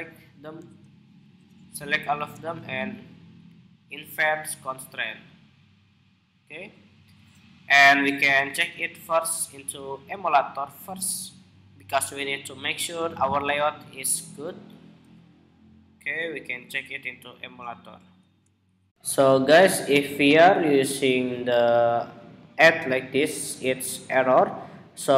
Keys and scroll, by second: 18.6 shift+super+2.